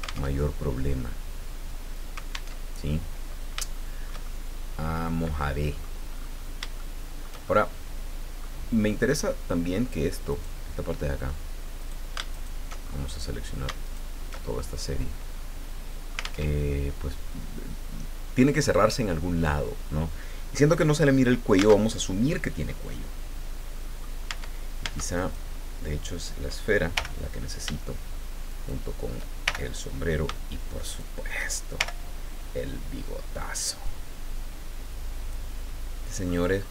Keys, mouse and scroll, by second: 0.3 alt+Tab, 2.5 alt+Tab, 3.1 scroll down 2, 3.6 shift+middle click, 3.6-6.0 shift+drag, 6.1-6.6 scroll up 3, 6.7 shift+middle click, 7.8 middle click, 10.3 click, 11.8 click, 12.3 alt+shift+right click, 12.8-13.5 alt+shift+scroll up 1, 13.8 alt+shift+right click, 14.4-15.0 alt+shift+scroll down 1, 15.3-16.4 drag, 16.4 alt+Tab, 21.8 alt+Tab, 22.7-24.1 drag, 24.3 Tab, 25.1 right click, 26.9 l, 28.5 shift+right click, 29.4 shift+l, 30.8 shift+right click, 31.7 shift+l, 33.8-35.5 drag, 35.6 middle click, 36.5-36.7 scroll up 3.